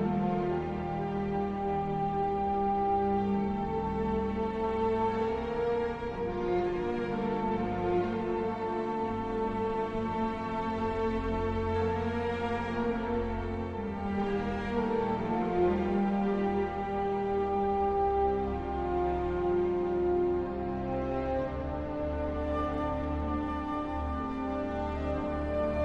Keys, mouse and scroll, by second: 0.1 space, 1.2 a, 3.2 shift+click, 3.2 w, 5.6-13.5 typing, 14.7 space, 15.1 space, 15.7 d, 17.5 d, 19.6 w, 20.2 a, 24.1 w, 25.6 shift+w.